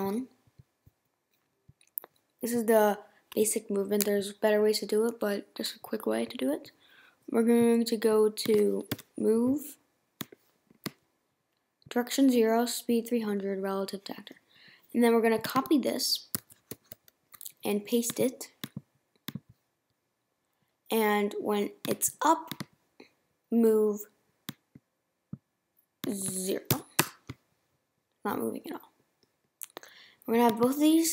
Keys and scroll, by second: 0.0 Return, 8.9 m, 16.3 super+c, 26.7 0.